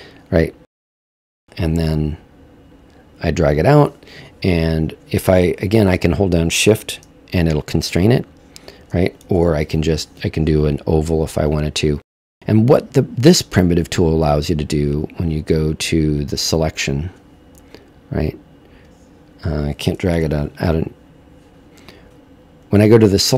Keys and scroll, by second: 5.9 super+z, 9.3 super+z, 20.1 super+z.